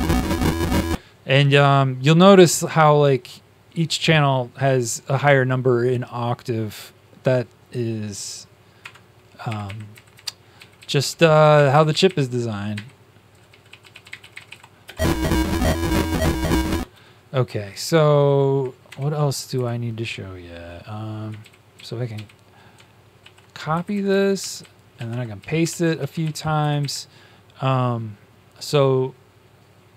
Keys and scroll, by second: 8.8 \, 9.9 Up, 9.9 Left, 10.1 Left, 10.5 Right, 10.7 Right, 10.9 Right, 11.2 Left, 11.8 Up, 12.7 Up, 12.7 e, 13.9-14.9 typing, 18.3 Up, 18.8 Up, 18.8 Tab, 19.3 Left, 19.5 Left, 21.3 shift+Right, 21.7 shift+Right, 22.2 shift+Right, 23.1 ctrl+c, 23.7 Left, 23.8 Left, 24.0 Left, 24.3 Down, 25.1 ctrl+v, 25.3 Down, 25.6 ctrl+v, 25.9 Down, 26.2 ctrl+v.